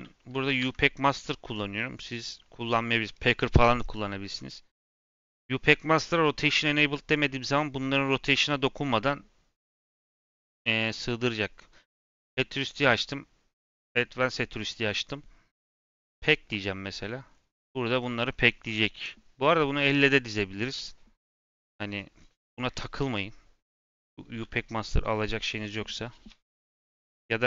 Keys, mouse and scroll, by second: 0.5 n, 1.9 click, 16.3-16.8 drag, 16.8-17.2 middle drag, 17.2 scroll up 2, 17.7-27.4 middle drag.